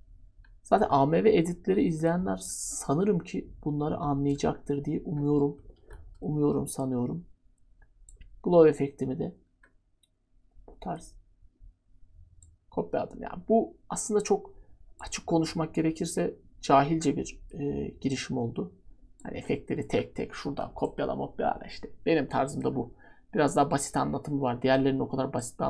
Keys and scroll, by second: 5.7 ctrl+d.